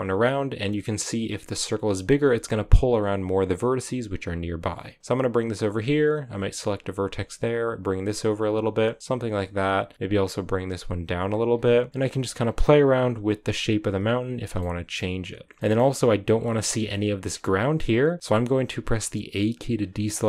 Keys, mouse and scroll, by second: 6.3 right click, 6.7 g, 8.3 right click, 8.3 scroll down 3, 8.6 g, 9.2 right click, 9.4 g, 11.4 scroll up 2, 11.9 right click, 11.9 g, 12.3-12.9 scroll up 2, 12.9 right click, 13.0 g, 13.8 right click, 14.4 g, 14.6 shift+middle click, 15.4 g, 15.6-18.2 shift+middle drag, 18.2 b, 19.4 a.